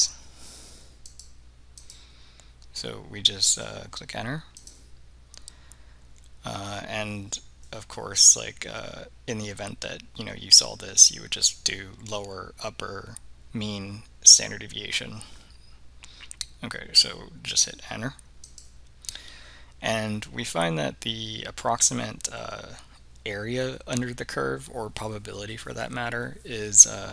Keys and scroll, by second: 1.2 Return, 1.9 Return, 4.6 Return, 18.6 Return.